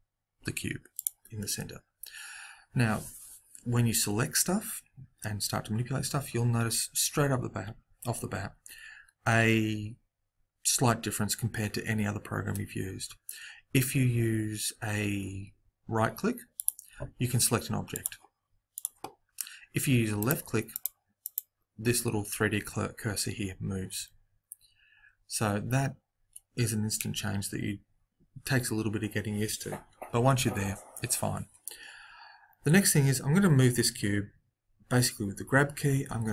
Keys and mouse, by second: 16.5-20.4 right drag, 20.1-23.0 drag, 36.0 g.